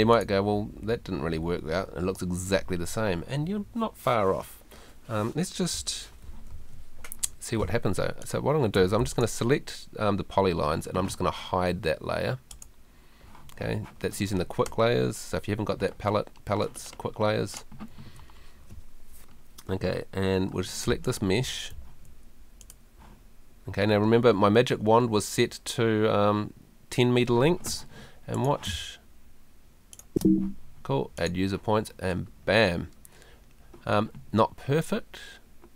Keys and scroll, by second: 1.1 Escape, 6.5 super+z, 8.8 Escape, 17.9 super+z, 21.9 Escape, 28.7 space.